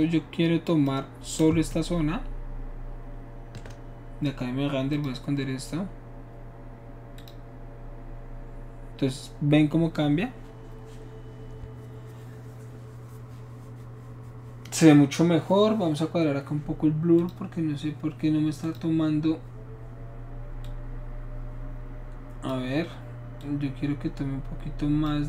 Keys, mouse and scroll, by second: 1.8-4.9 shift+middle drag, 4.9 shift+click, 7.2 click, 17.2 click, 18.7 click, 20.7-22.5 drag, 23.4-25.1 drag.